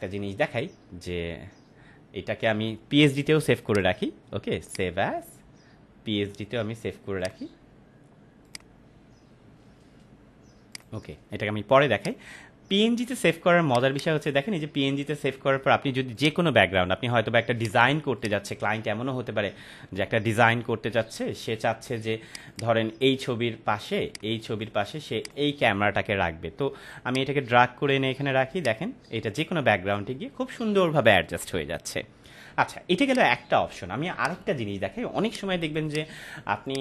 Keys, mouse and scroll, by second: 3.6 click, 7.2 click, 16.2-16.7 drag, 22.2-24.7 drag.